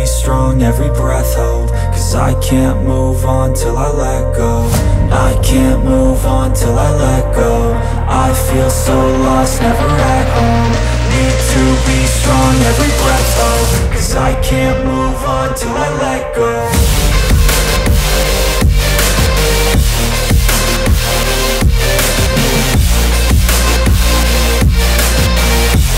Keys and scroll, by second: 19.3 space.